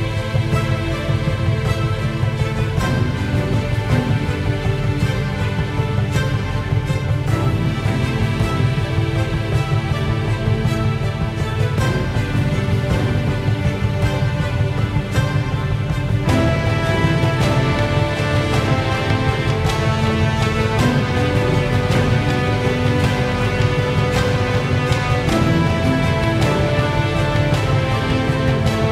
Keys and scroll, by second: 6.5 space, 19.1 space, 28.7 space.